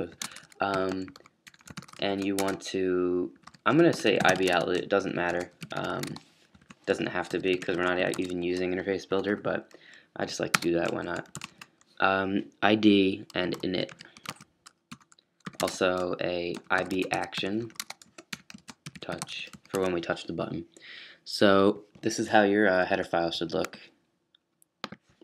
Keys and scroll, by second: 0.0-8.7 typing, 11.1-12.0 typing, 13.2-20.2 typing, 22.2 typing.